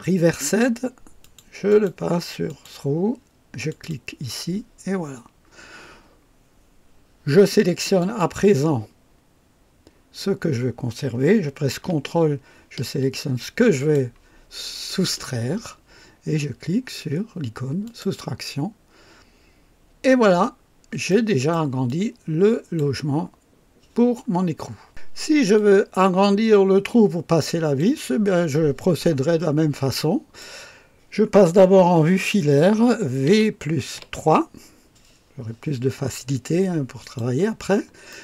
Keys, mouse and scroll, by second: 1.2 click, 1.7 click, 2.5 click, 3.7 click, 5.1-5.5 scroll down 2, 8.0 click, 13.7 ctrl+click, 17.8 click, 20.6 scroll down 2, 21.1-21.7 right drag, 21.9 click, 25.6-28.0 drag, 29.5 scroll up 2, 30.0-30.6 right drag, 33.3 v, 34.1 KP_3, 37.0 click, 37.7 scroll up 1, 38.1-38.2 right drag.